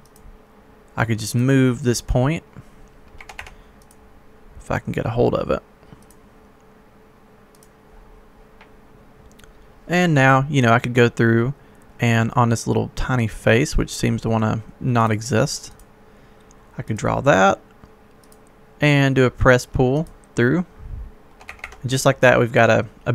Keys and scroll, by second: 3.2 Escape, 3.3 Escape, 21.5 Escape.